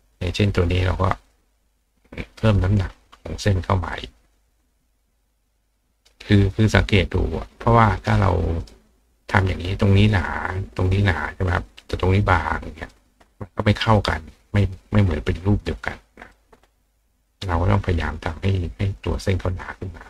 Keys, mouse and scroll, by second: 0.5-2.4 drag, 3.8 click, 4.6 click, 7.6 click, 8.0 right click, 8.6 right click, 12.5 click, 14.2 click, 15.7 click, 17.2 click, 18.6-19.8 drag.